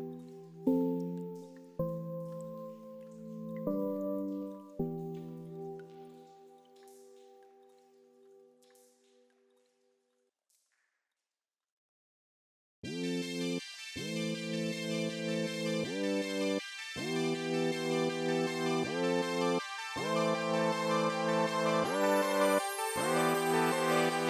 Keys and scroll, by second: 5.6 ctrl+z.